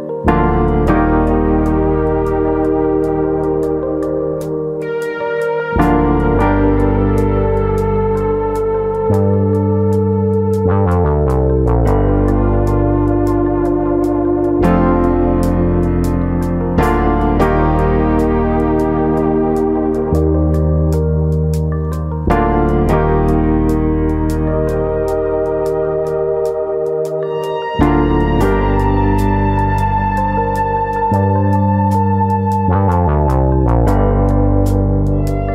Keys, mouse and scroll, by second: 1.3 click, 2.0 alt+click, 2.7 click, 4.1 click, 4.4 alt+click, 10.7 click, 11.5 click, 12.7 alt+click, 13.5 r, 14.2 click, 14.6 click, 16.1 alt+click, 16.7 ctrl+b, 19.0 click, 19.6 alt+click, 20.2 click, 22.1 click, 23.8 click, 25.0 alt+click, 25.7 alt+click, 26.4 click, 28.1 click, 30.3 click, 31.6 shift+click, 32.7 shift+click, 33.5 shift+middle click.